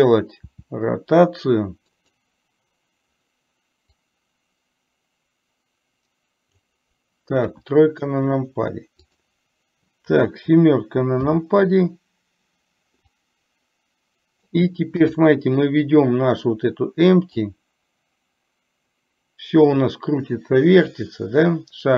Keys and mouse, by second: 0.5 r, 4.1 click, 4.4-6.8 drag, 9.1 click, 13.3-14.6 drag, 17.5-21.9 drag.